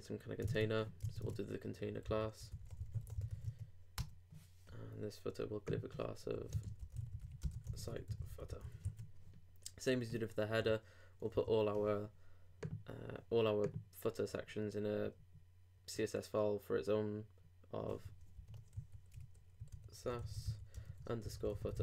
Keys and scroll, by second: 0.5 super+Tab, 2.0 super+., 7.2-8.0 typing, 8.8 super+r, 10.6 alt+super+m, 18.3 alt+super+n, 18.7 alt+super+s, 20.5-21.7 typing.